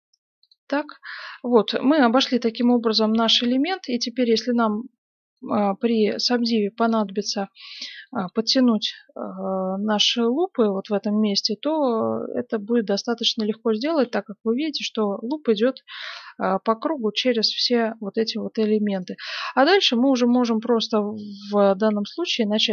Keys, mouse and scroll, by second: 0.8-1.9 middle drag, 1.9-4.9 right drag, 2.0-3.2 middle drag, 2.0 g, 3.8-6.6 middle drag, 5.9 right click, 6.1 g, 7.7-10.1 middle drag, 10.1 right click, 10.4 g, 13.9 ctrl+r, 17.5-20.6 right drag, 17.9-19.6 middle drag, 20.6 middle click, 21.1 right click, 21.8 f.